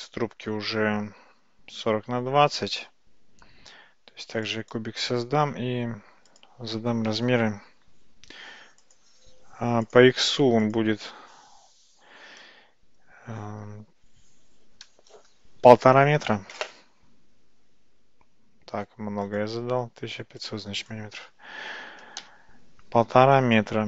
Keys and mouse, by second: 0.7 shift+a, 6.4-9.0 drag, 9.9 click, 10.7-17.1 drag, 19.3-23.1 drag.